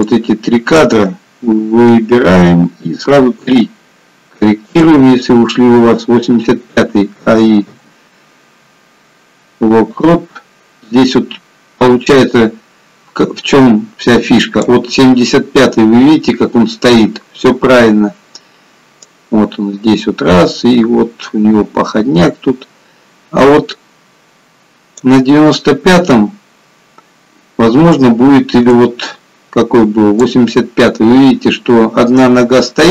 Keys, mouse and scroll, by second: 0.0 click, 2.4 g, 7.4 a, 7.9 i, 11.4-12.2 scroll up 1, 12.7 click, 12.7 scroll up 2, 19.4 click, 27.1-28.2 scroll down 1, 29.0 click, 31.5-32.9 scroll up 2.